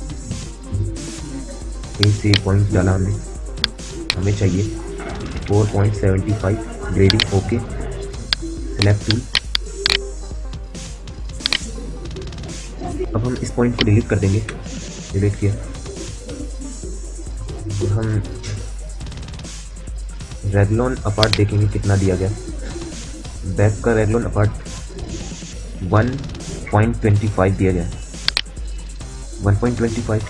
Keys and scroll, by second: 1.1 a, 4.8-6.4 typing, 12.3 F9, 14.2 Delete, 29.9 a.